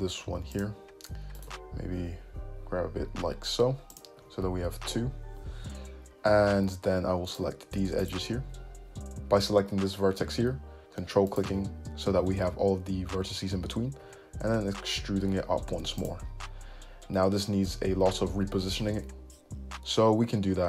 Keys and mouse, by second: 1.5 alt+click, 2.1 g, 4.2 `, 4.3-7.4 middle drag, 6.3 `, 7.4 click, 7.8 shift+middle click, 8.1 shift+click, 8.2-9.2 shift+middle drag, 11.4 ctrl+click, 14.1 e, 17.7-20.6 middle drag, 19.0 `.